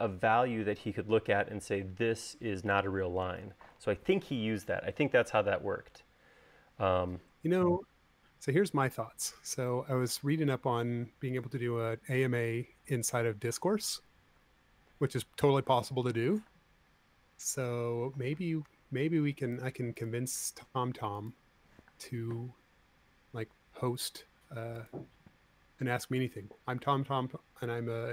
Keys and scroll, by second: 13.7 shift+q, 16.5-17.7 typing, 19.6 Left, 20.0 Right, 22.7 m.